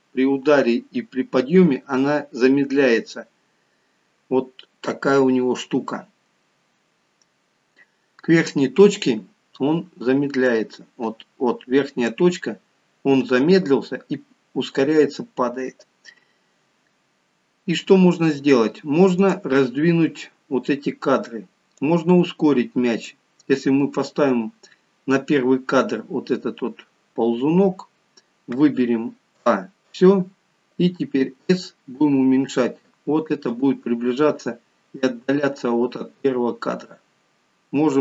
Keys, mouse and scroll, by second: 31.2 s.